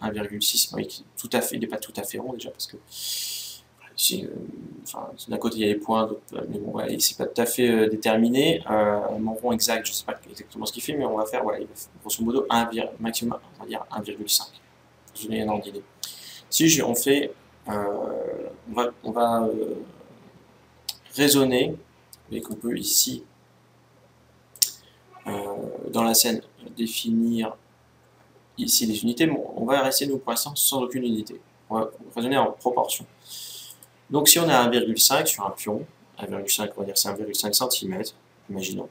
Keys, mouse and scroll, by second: 22.1-23.9 drag, 24.2-26.0 drag, 33.3-35.1 drag.